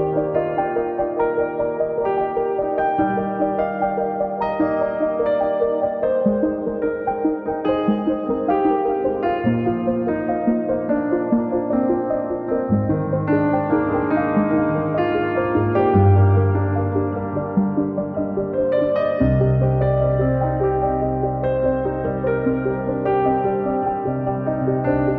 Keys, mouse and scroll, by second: 0.0 click, 0.7 scroll up 2, 1.0 scroll down 3, 4.2-4.5 scroll up 7, 4.5 click, 5.4 scroll up 2, 5.6 scroll down 2, 5.7 middle drag, 6.0 scroll up 4, 6.2 click, 6.6-7.2 middle drag, 7.8 middle click, 7.9 KP_1, 8.1 scroll up 1, 8.4 scroll down 2, 9.2 click, 9.5 click, 9.7 scroll down 1, 9.9-10.4 middle drag, 11.0 KP_1, 11.5 scroll up 10, 11.7 scroll down 3, 12.2 click, 15.5 click, 16.2 scroll down 5, 16.5 KP_0, 17.0 click, 17.2 scroll down 3, 17.6-18.9 drag, 19.2-21.0 right drag, 21.0 click, 21.1 scroll down 6, 21.6 click, 22.0-22.5 scroll down 4, 22.1 KP_0, 22.5 scroll up 1, 23.2 click, 23.8 scroll up 1, 24.5 scroll up 2, 24.8 scroll down 3.